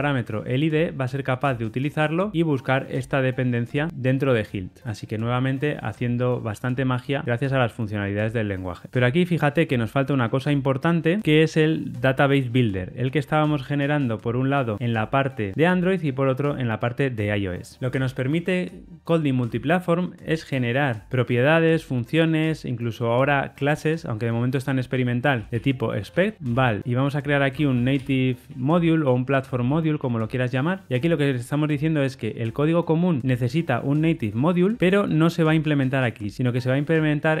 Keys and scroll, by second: 5.3 ctrl+alt+Left.